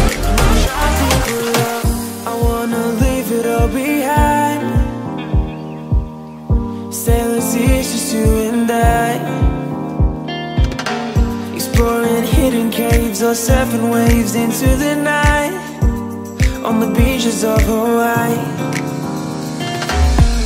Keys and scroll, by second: 7.1 Return, 7.8 space.